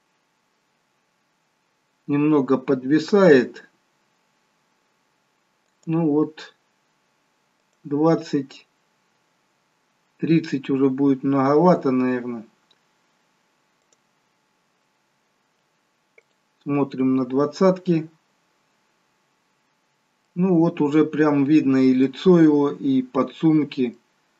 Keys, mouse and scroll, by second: 1.6-2.0 scroll down 4, 6.8 click, 10.4 scroll up 2, 14.9 click, 19.4 click, 22.2 middle click, 23.5 scroll down 1.